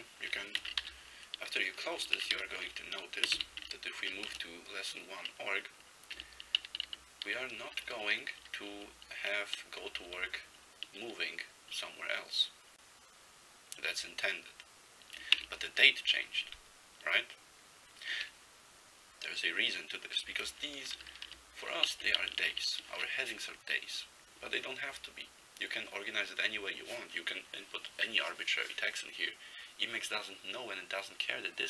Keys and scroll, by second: 0.7 ctrl+x, 0.9 k, 2.3 ctrl+x, 2.4 0, 3.3 ctrl+x, 3.4 ctrl+b, 4.4 Return, 6.8 ctrl+n, 6.9 ctrl+n, 7.3 ctrl+n, 7.7 ctrl+p, 7.9 ctrl+p, 8.3 ctrl+p, 8.5 ctrl+p, 8.8 ctrl+n, 9.9 ctrl+b, 10.0 ctrl+b, 10.2 ctrl+b, 15.5 ctrl+n, 15.9 ctrl+f, 16.4 ctrl+f, 16.4 ctrl+f, 20.7 ctrl+p, 20.9 ctrl+p, 21.0 ctrl+p, 21.2 ctrl+p, 21.3 ctrl+p, 21.9 ctrl+n, 22.2 ctrl+a, 22.5 ctrl+a.